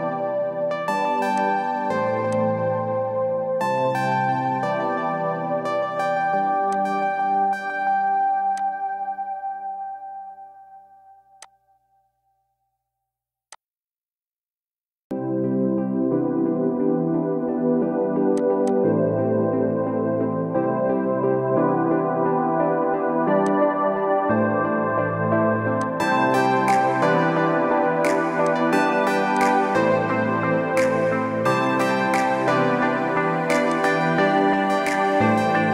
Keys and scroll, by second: 0.0 ctrl+d, 15.7 Return, 25.1 b, 30.3 Return, 33.9 ctrl+t.